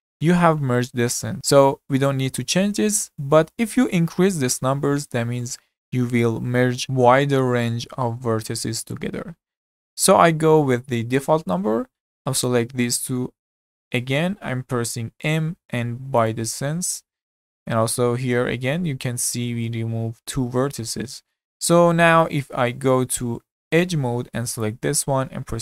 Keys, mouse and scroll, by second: 12.5 click, 15.1 m, 20.9-22.6 middle drag, 22.6 z, 23.8 2, 24.6 click.